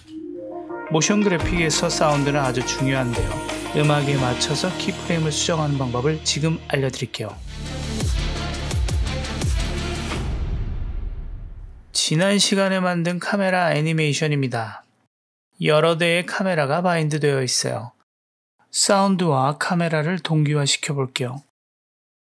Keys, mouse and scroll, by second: 14.6 space, 22.0 space.